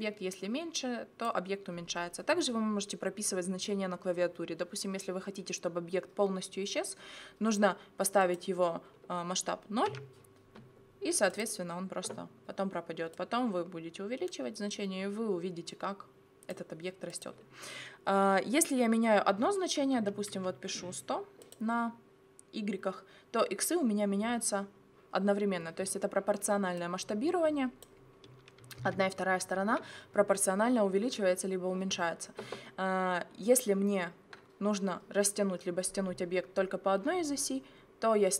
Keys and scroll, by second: 9.9 0, 19.3 1, 20.0 0, 28.8 ctrl+z.